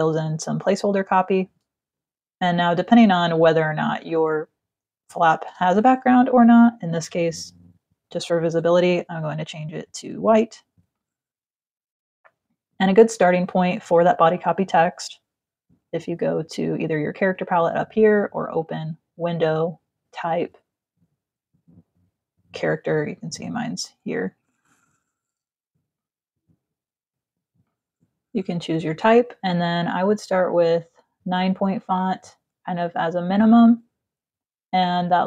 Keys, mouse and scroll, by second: 0.5 click, 2.6 click, 3.7 click, 7.0 click, 8.8 click, 10.5 click, 13.9 click, 18.0 click, 22.0 click, 25.2 click, 27.1 click, 31.1 click.